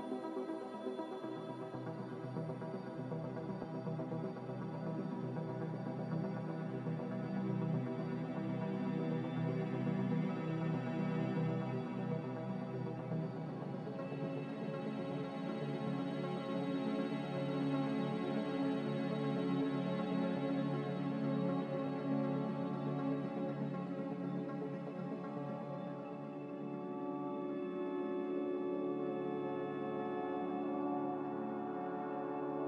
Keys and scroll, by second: 0.3 ctrl+b, 24.0 b, 28.0 Delete, 30.5 Delete.